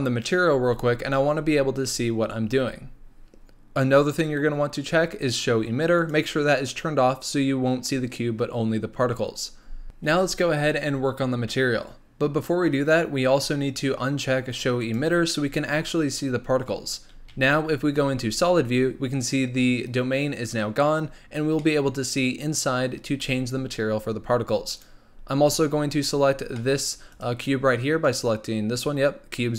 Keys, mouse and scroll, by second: 6.0 click, 14.9 click, 17.3 z, 21.6-24.8 middle drag, 24.8 click, 25.9 click, 26.5-27.1 middle drag, 27.1 click, 28.0 click.